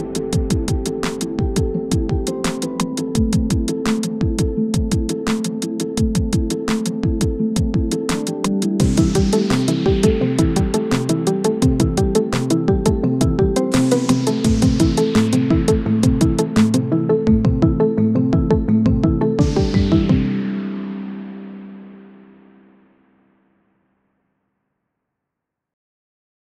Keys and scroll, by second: 0.1 ctrl+g, 0.9 shift+Page_Up, 1.6-2.5 typing, 3.7 ctrl+g, 4.5 c, 4.9 shift+F2, 5.2 Escape, 10.4 Escape, 12.9-13.8 typing, 16.9 shift+F2, 17.4 F9.